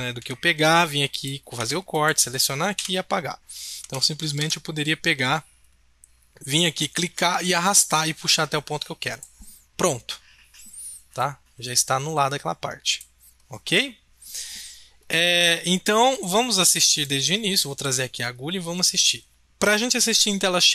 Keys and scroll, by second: 0.1 b, 1.7 a, 2.7 Delete, 3.8 ctrl+z, 4.3 ctrl+z.